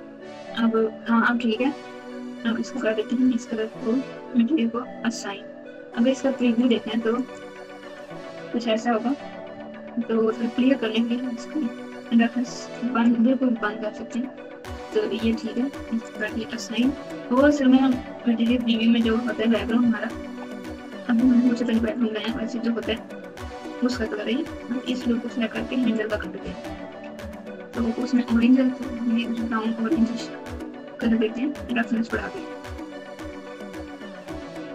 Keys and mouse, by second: 7.5 click, 8.0 click, 12.0 click, 15.5 click, 16.4 Tab, 17.5-20.2 typing, 23.3 Tab, 24.8 alt+click, 27.9 click, 29.2 click, 32.0 click.